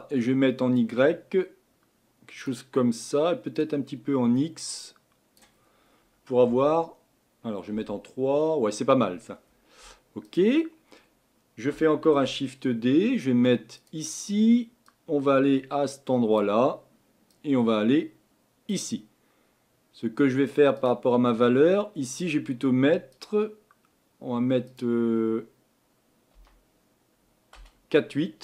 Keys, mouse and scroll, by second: 6.5 KP_1, 7.7 KP_3, 12.1 shift+d, 16.4 click, 18.7 click, 27.5 click.